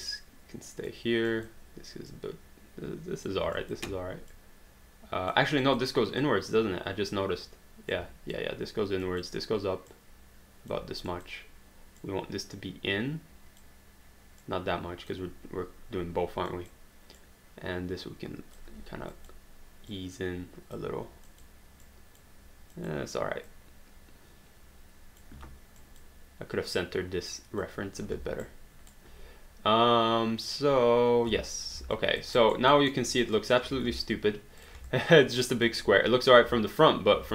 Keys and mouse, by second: 0.0 click, 1.3 click, 3.6 click, 5.6 click, 9.9 click, 11.1 click, 14.4 click, 16.5 click, 19.1 click, 21.3 click, 25.8 click, 28.4 alt+right click, 31.3 space, 32.0 alt+click, 32.3 alt+right click, 32.7 alt+middle click, 33.1 alt+right click, 33.4 alt+click, 33.8 alt+d, 34.6 click, 35.0 alt+click.